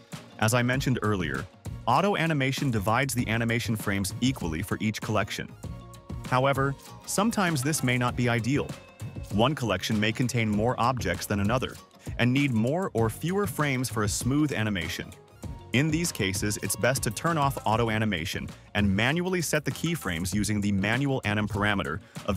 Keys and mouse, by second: 0.2 space, 8.0 space, 8.5 click, 8.8 click, 8.9 click, 9.1 click, 9.3 click, 10.3 click, 10.6 a, 11.0 t, 11.7 click, 12.6 click, 13.0 click, 13.3 click, 13.3-15.1 typing, 15.1-15.5 drag, 16.4 click, 17.1 drag, 17.3 click, 17.9 click, 18.5 shift+click, 18.8 a, 18.8 t, 19.2 ctrl+z, 19.4 space, 20.6 space, 21.1 drag.